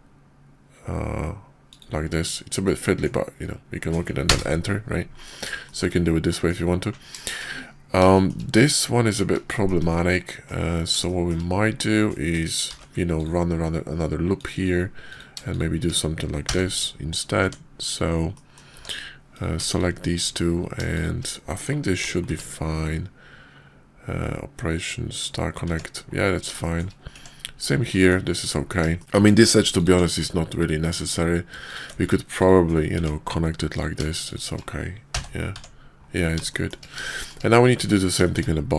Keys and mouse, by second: 2.6-4.4 drag, 5.6 shift+click, 6.2 middle click, 7.2 shift+middle click, 8.1 shift+middle click, 9.5 shift+click, 9.8 click, 11.0 shift+middle click, 12.5 ctrl+r, 15.0 click, 16.4 j, 17.3 Tab, 17.8 click, 18.3 click, 18.7 Tab, 19.2 click, 19.6 shift+click, 20.9 shift+click, 22.2 q, 25.6 Tab, 26.5 shift+click, 27.1 Tab, 27.8 click, 28.9 shift+click, 29.1 Tab, 30.0 x, 31.0 click, 31.6 ctrl+click, 31.9 x, 32.9 Tab, 33.6 click, 34.1 shift+click, 35.1 j, 35.4 Tab, 36.5 shift+drag, 37.0 shift+drag, 37.7 Tab, 38.2 shift+click.